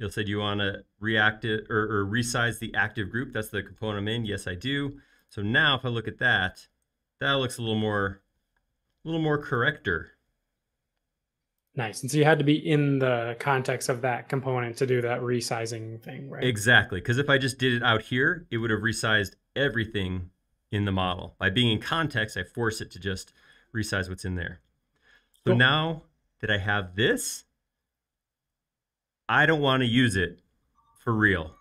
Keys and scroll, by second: 5.1 space, 8.4 m, 12.1 space, 12.7 space.